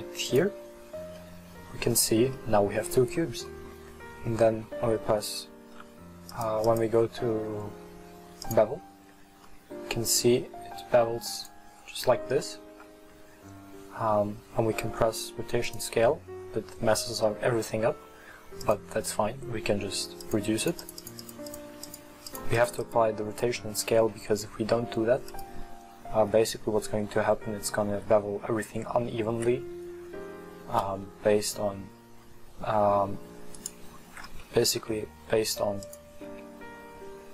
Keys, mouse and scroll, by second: 1.3-3.0 middle drag, 3.0-3.5 scroll up 2, 3.5-6.4 middle drag, 6.4 click, 6.7-9.1 drag, 9.1 scroll up 2, 9.5-11.5 middle drag, 11.5 click, 12.1-12.5 scroll up 1, 12.5-12.9 middle drag, 12.9 scroll down 1, 14.5 ctrl+a, 18.6 click, 20.3-23.8 drag, 25.4-28.5 drag, 34.9 Tab, 36.0 click, 36.4 Tab.